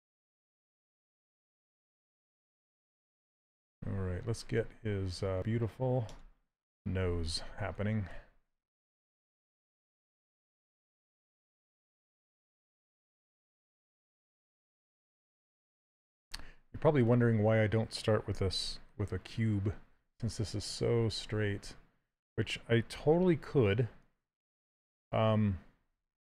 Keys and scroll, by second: 7.4 s, 22.7 w.